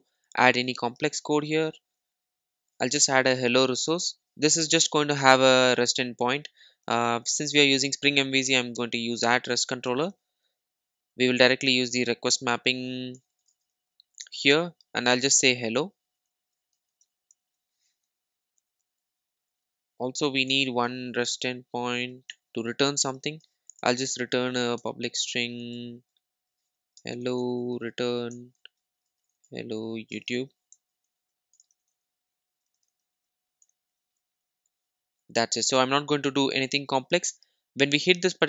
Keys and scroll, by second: 9.9 Return, 14.3 Return, 22.3 Return, 28.3 Return, 37.8 super+s.